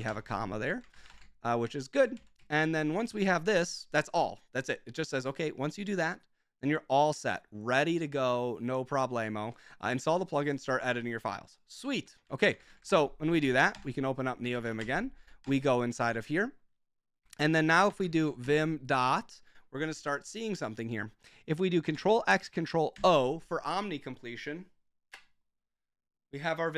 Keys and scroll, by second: 0.0-1.5 typing, 0.6 Escape, 2.1 Escape, 2.5 super+j, 12.0 super+j, 12.3-13.2 typing, 13.3 Up, 13.7 Return, 14.5 typing, 14.7 Up, 15.4 Return, 15.9-19.8 typing, 22.0 ctrl+x, 22.9 ctrl+o.